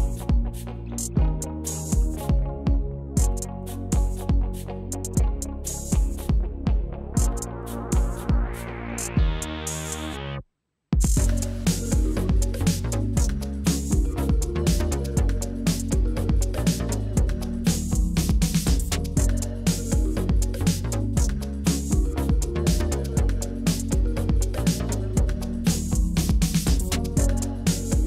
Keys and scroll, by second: 4.8 ctrl+c, 6.4 ctrl+v, 18.5 Up, 18.5 Up, 26.3 ctrl+c, 27.5 ctrl+v.